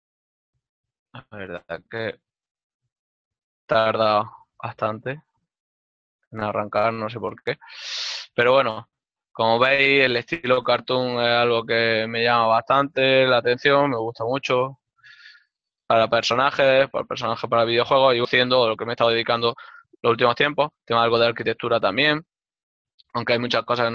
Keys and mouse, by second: 17.5 click.